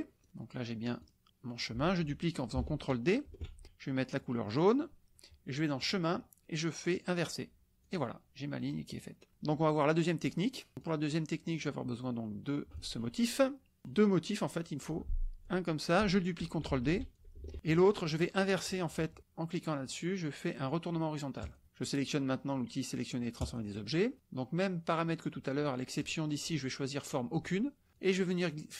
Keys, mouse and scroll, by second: 0.2 click, 1.1 click, 3.3 ctrl+d, 4.4 click, 5.8 drag, 7.1-7.4 drag, 7.8 click, 8.6 click, 10.8 click, 11.6-12.9 drag, 15.5 click, 16.8 ctrl+d, 17.2 ctrl+click, 21.4 click, 23.4-23.7 drag, 26.0-27.5 drag, 27.9-28.7 drag.